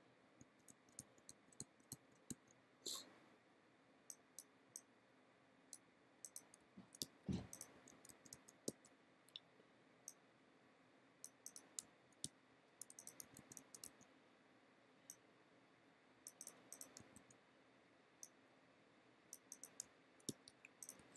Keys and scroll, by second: 0.4 b, 6.7 f, 7.1 g, 7.8 b, 11.9 f, 12.3 g, 13.3 b, 17.1 b, 19.9 f, 20.3 g, 21.0 b.